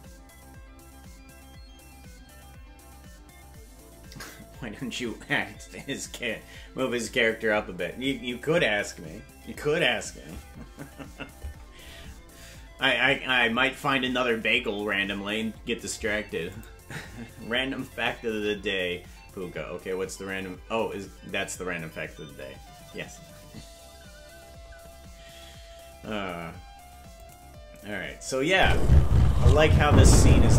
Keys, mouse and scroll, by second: 27.2 click, 28.5 space.